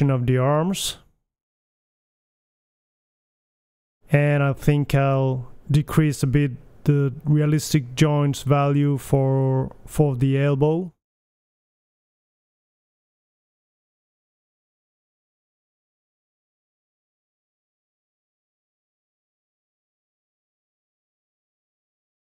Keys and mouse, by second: 1.0-2.4 middle drag, 1.8 r, 3.2-4.2 drag, 3.8 g, 4.2-4.5 middle drag, 7.8-8.8 middle drag, 10.0-12.3 drag, 12.7 click, 14.7 g, 17.9 click, 19.4 click, 19.8 BackSpace, 20.6 click, 22.2 ctrl+c.